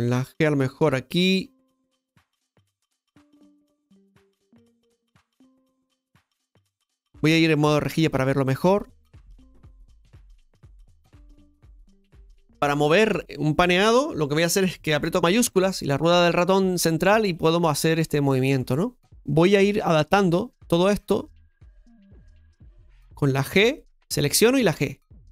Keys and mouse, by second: 3.4 right click, 3.8 click, 7.9 click, 10.4 right click, 12.4 KP_7, 15.2-19.0 shift+middle drag, 19.2-21.0 shift+middle drag, 21.0-23.7 drag, 23.7 g, 24.2 click.